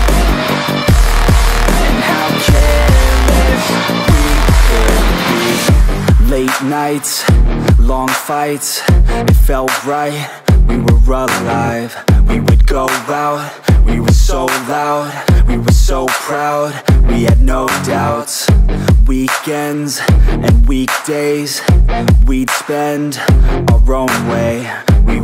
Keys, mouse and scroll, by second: 3.1 click, 7.1 click, 12.7 click, 19.3-22.9 drag.